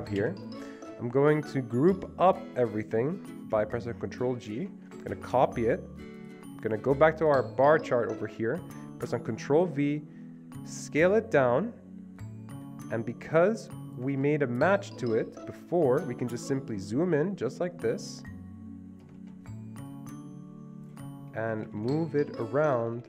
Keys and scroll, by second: 0.3 Delete, 4.5 ctrl+g, 5.4 ctrl+c, 9.5 ctrl+g, 9.6 ctrl+v, 14.2 ctrl+z, 19.2 ctrl+z, 21.6 Right, 21.7 Right, 21.9 Right, 22.0 Right, 22.1 Right, 22.2 Right, 22.4 Right, 22.5 Right, 22.8 Right, 22.9 Right, 23.0 Right.